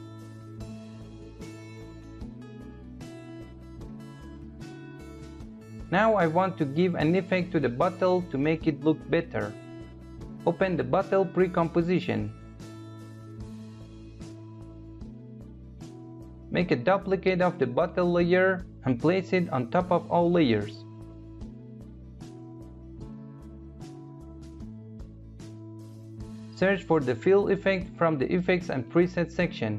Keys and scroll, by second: 18.0 ctrl+d.